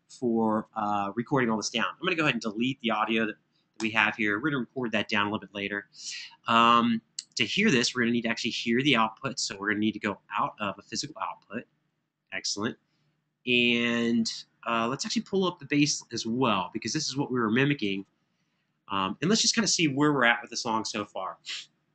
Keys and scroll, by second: 3.5 BackSpace.